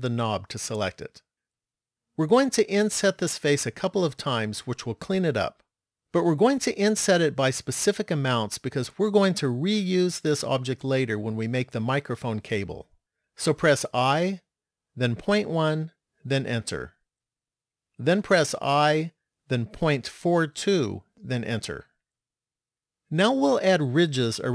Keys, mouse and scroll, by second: 13.8 i, 18.4 i.